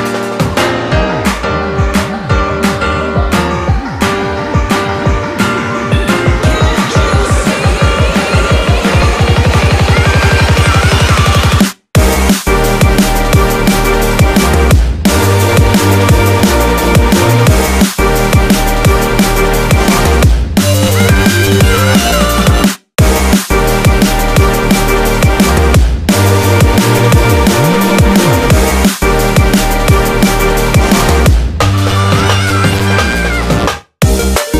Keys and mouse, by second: 2.0-4.0 ctrl+middle drag, 4.0-4.8 ctrl+KP_8, 5.7 KP_7, 6.8 KP_1, 7.7-8.6 ctrl+KP_8, 9.5-11.9 ctrl+middle drag, 11.9 click, 13.1 s, 17.6 ctrl+r, 21.4-22.8 ctrl+middle drag, 22.8 ctrl+r, 25.4-26.8 ctrl+middle drag, 26.8 ctrl+r, 31.8 ctrl+r.